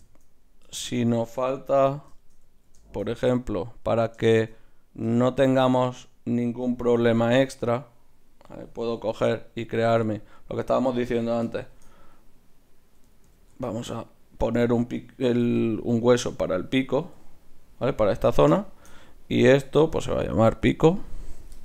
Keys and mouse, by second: 0.7 Tab, 1.8 KP_3, 3.7-5.3 drag, 5.3 shift+d, 6.9 r, 9.0 g, 9.9 s, 11.2 s, 13.4 ctrl+alt+s, 15.3 g, 16.5-18.6 right drag, 17.0 g, 18.6 middle click, 19.3-21.2 right drag, 20.6-21.6 drag.